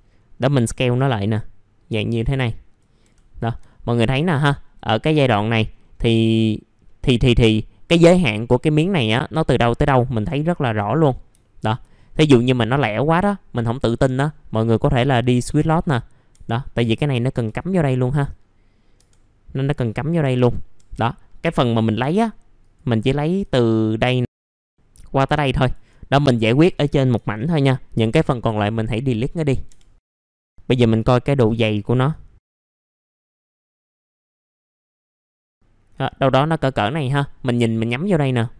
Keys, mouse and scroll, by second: 0.0-0.4 scroll up 1, 0.9-3.0 drag, 3.0 F4, 3.7 alt+middle click, 4.1 scroll down 1, 4.4 alt+middle click, 5.2 scroll up 1, 6.8 middle click, 9.3 scroll up 1, 10.1 scroll up 1, 10.9 middle click, 11.4 alt+middle click, 11.9 scroll up 1, 12.4 middle click, 13.6 click, 14.0 F3, 14.3-15.3 scroll up 1, 15.3 click, 15.6 F3, 17.1-17.8 scroll down 2, 17.3 F3, 17.9 alt+middle click, 18.4-18.9 scroll up 1, 18.9 F3, 19.7 click, 20.2 F3, 20.3 right click, 20.7 F3, 21.0 middle click, 21.2 scroll down 1, 22.3-22.6 scroll down 3, 22.6 click, 24.2 ctrl+click, 24.4 scroll down 1, 24.5 alt+middle click, 26.2 middle click, 29.3 alt+middle click, 29.7 F3, 30.0 scroll down 1, 30.2 middle click, 30.7-31.1 scroll up 1, 31.5-32.1 scroll up 1, 32.1 click, 32.4-32.7 scroll up 1, 32.7 click, 33.8 middle click, 34.5-36.5 drag.